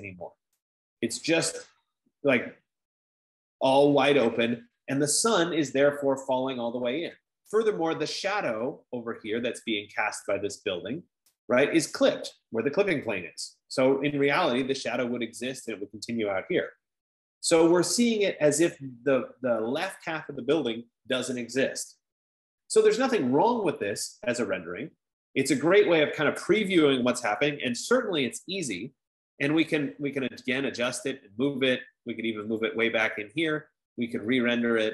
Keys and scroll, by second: 27.4-28.9 typing, 32.0-32.8 typing.